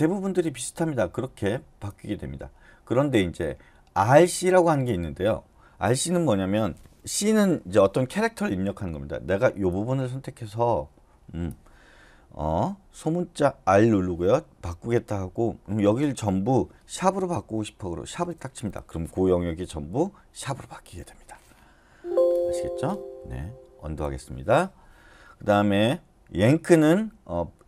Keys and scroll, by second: 18.2 shift+3, 21.9 Escape, 23.9 u.